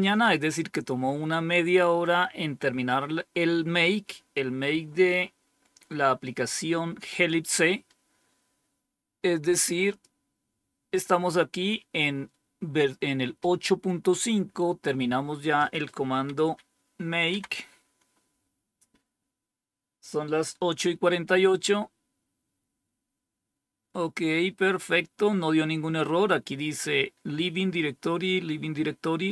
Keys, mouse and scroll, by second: 9.8 click, 15.5 click, 17.2 Down, 21.6 scroll down 1, 23.1-23.5 scroll down 2, 24.6-26.7 scroll down 1, 26.7-29.3 scroll down 1.